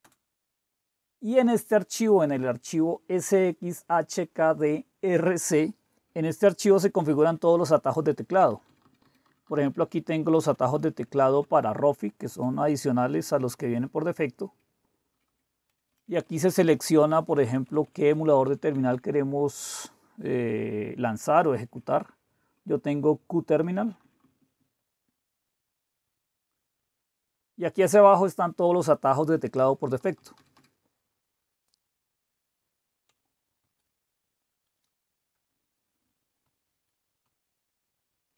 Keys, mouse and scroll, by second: 0.0-0.5 typing, 5.9 Down, 8.1 Down, 8.3 Down, 8.5 Down, 8.7 Down, 8.8 Down, 9.0 Down, 9.3 Down, 9.8 Down, 10.2 Up, 10.4 Up, 10.5 Up, 10.7 Up, 10.9 Up, 11.1 Up, 11.2 Up, 12.3 Up, 15.1 Down, 15.3 Down, 15.7 Up, 15.9 Up, 16.1 Up, 16.2 Up, 16.4 Up, 16.6 Up, 17.3-18.4 Up, 18.4 Down, 18.6 Down, 18.7 Down, 18.9 Down, 23.7 Down, 23.8 Down, 24.0 Down, 24.2 Down, 24.4 Down, 24.6-25.3 Down, 25.8-26.1 Down, 26.6 Down, 29.7 Down, 30.0 Down, 30.2 Down, 30.3 Down, 30.5 Down, 33.6 ctrl+x, 36.4 super+3, 37.2 super+2.